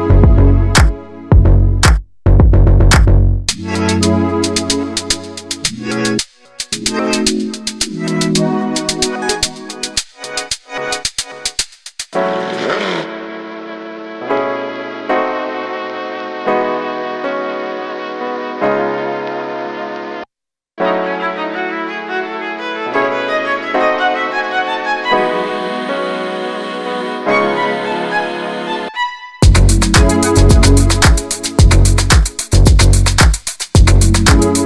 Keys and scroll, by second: 10.2 space, 10.3 space, 12.1 space, 21.3-23.1 typing, 24.1 Down.